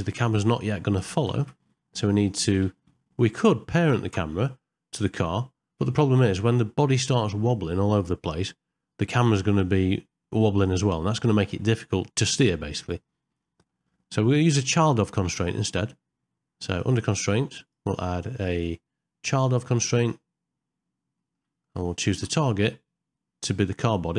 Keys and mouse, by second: 1.4 shift+Left, 4.0 KP_0, 13.4 middle click, 14.0 shift+middle click, 16.7 click, 17.7 click, 18.6-20.1 drag, 21.2 middle click.